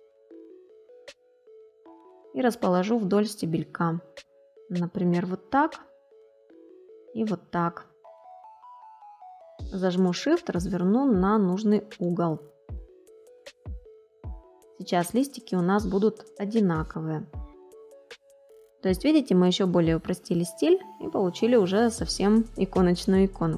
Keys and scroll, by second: 19.7 space.